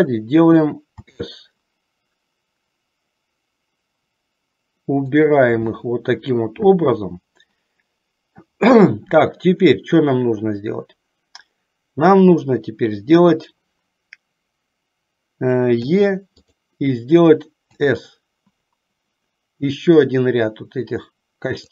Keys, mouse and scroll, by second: 1.2 s, 16.0 e, 17.8 s.